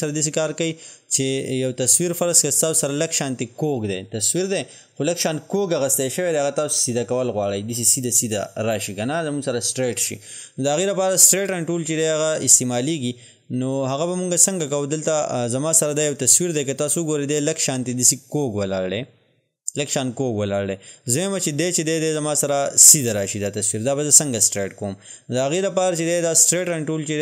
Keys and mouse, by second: 13.8 click.